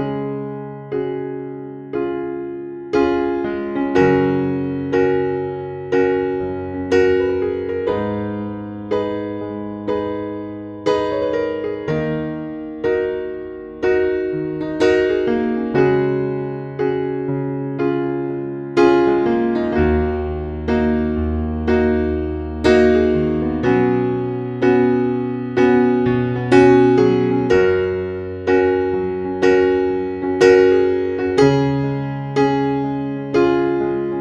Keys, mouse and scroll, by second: 4.0 scroll down 1, 5.0 click, 5.6-6.6 scroll up 1, 6.6-12.0 drag, 17.2 scroll down 1, 19.2 click, 20.7-22.4 scroll up 1, 22.4-26.9 drag, 27.4 scroll down 1, 28.2 click, 29.6 scroll up 1, 30.4 click, 30.9-34.2 scroll down 1.